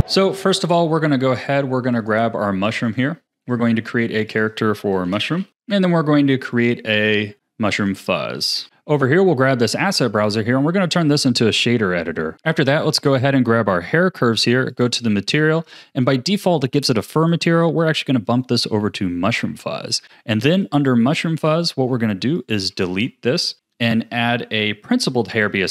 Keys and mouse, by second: 1.9 click, 2.9 click, 4.4-5.5 drag, 5.5 o, 6.5 click, 7.3 click, 7.8 click, 8.6 o, 8.6 z, 9.9-10.9 drag, 13.4 click, 14.7 click, 17.2-18.6 drag, 19.8 click, 20.3 click, 20.6 click, 22.6 x, 23.5 shift+a.